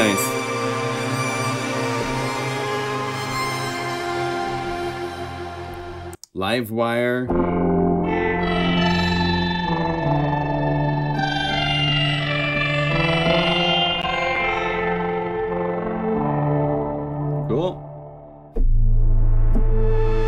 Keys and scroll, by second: 7.2 F1, 7.3 F2, 13.9 F2, 13.9 F4, 15.4 F2.